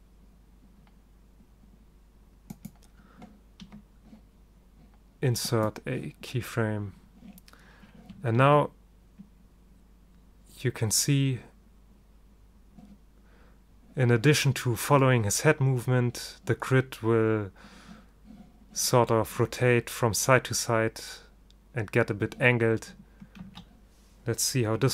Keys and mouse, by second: 3.8 i, 8.6 alt+a, 23.6 alt+a.